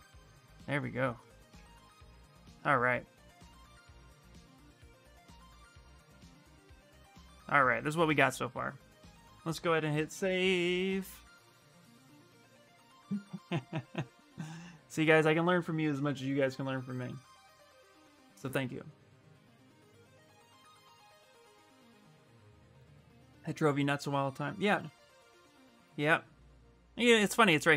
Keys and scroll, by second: 9.9 ctrl+s, 11.3 Return, 11.5 Return.